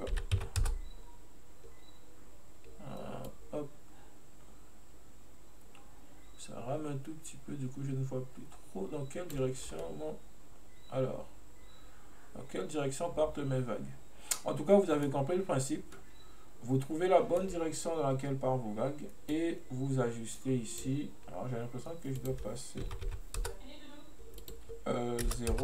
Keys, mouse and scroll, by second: 3.4-6.4 drag, 9.7 scroll down 1, 9.9-12.9 middle drag, 16.0-19.0 middle drag, 19.4-25.6 drag.